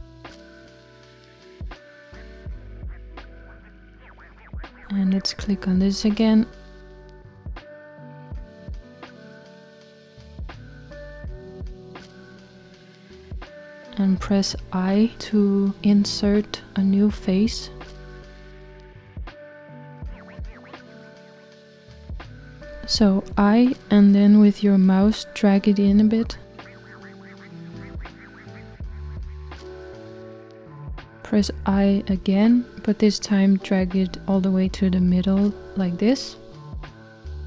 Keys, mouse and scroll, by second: 7.8 click, 11.5-14.4 shift+middle drag, 14.4-16.8 scroll up 1, 16.8-17.5 scroll up 1, 17.5 middle click, 18.3-19.0 scroll up 1, 19.0-20.2 middle drag, 20.2-21.5 scroll up 1.